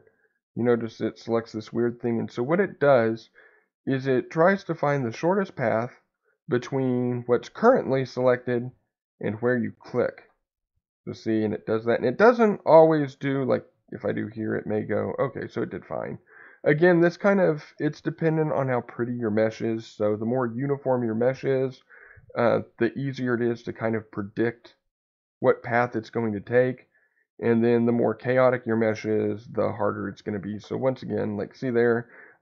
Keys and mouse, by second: 8.3 middle click, 12.9 click, 14.2 ctrl+click, 23.3 ctrl+click, 27.5 click.